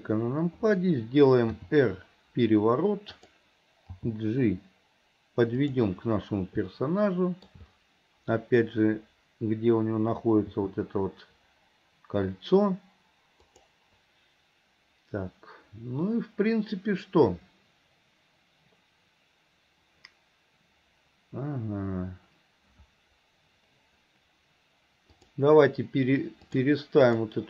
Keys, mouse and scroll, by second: 1.6 r, 4.0 g, 6.8 shift+scroll up 1, 6.9-7.6 shift+middle drag, 10.5 g, 25.2-27.4 drag.